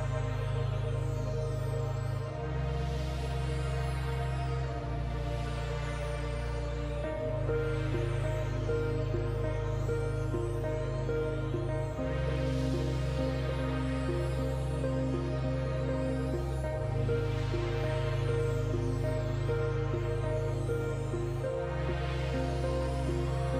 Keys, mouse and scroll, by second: 3.7 alt+scroll up 1, 4.3-23.5 drag.